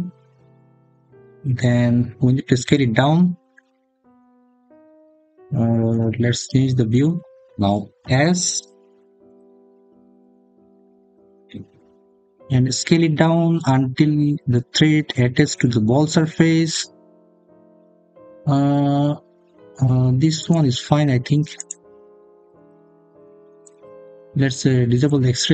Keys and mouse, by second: 0.4 click, 7.8 s, 20.2 click, 22.8 middle click, 24.8 click.